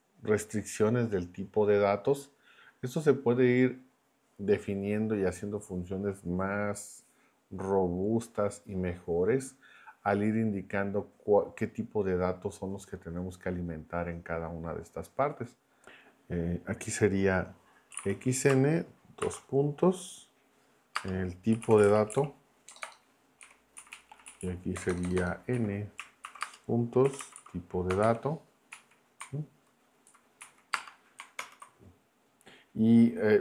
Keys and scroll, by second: 15.7 Left, 17.9 x, 19.2 shift+;, 20.9-23.4 typing, 23.7 Right, 24.3 Right, 24.7 BackSpace, 25.5 Right, 26.2-28.0 typing, 28.7 Right, 30.1 Left, 30.4 Right, 30.7 space, 31.4 ctrl+Return.